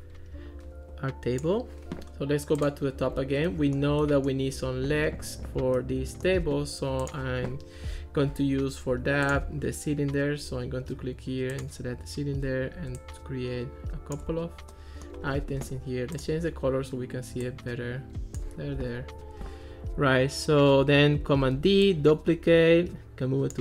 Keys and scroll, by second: 21.6 super+d.